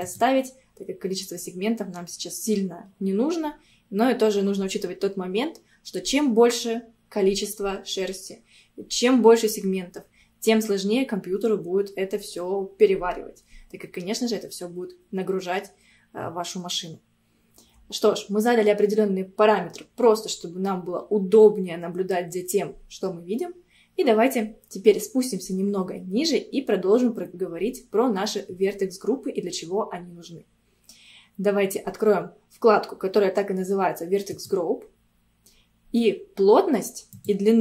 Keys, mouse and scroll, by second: 24.9 scroll down 2, 34.4 click, 35.1-37.2 scroll down 2, 37.2-37.6 drag.